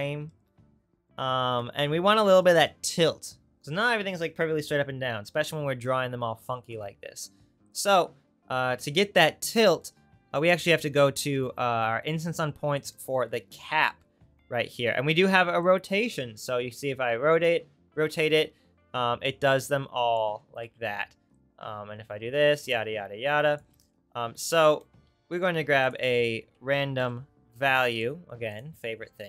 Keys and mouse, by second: 8.7 Tab, 11.4-13.4 drag, 20.7 ctrl+z, 23.8 ctrl+z, 25.0-28.7 shift+drag, 25.1 shift+a, 28.7 right click, 29.2 shift+click.